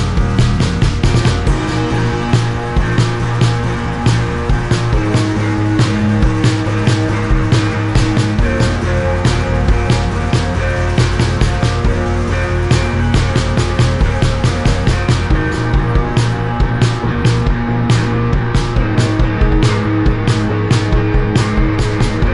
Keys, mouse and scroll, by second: 0.3 ctrl+z, 0.3 click, 1.9 right click, 3.7 click, 5.0 click, 6.4 click, 7.6 click, 8.7 click, 9.7 click, 10.2 click, 11.0 click, 12.2 click, 13.3 click, 15.2 right click, 17.7 click, 18.2 click, 19.2 right click, 22.0 click.